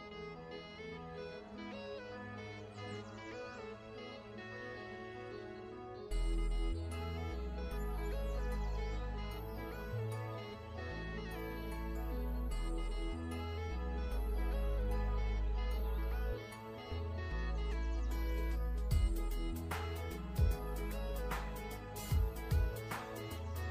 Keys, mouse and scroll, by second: 0.1 z, 0.4 click, 5.6 ctrl+Num_Lock, 5.7-7.7 ctrl+scroll down 2, 7.7 click, 10.4 v, 11.2 alt+shift+click, 11.9 click, 12.1-14.1 scroll up 1, 16.5 alt+shift+Num_Lock, 16.7 scroll up 1, 17.2-18.7 scroll down 1, 20.1 m, 21.1 click, 23.0 v.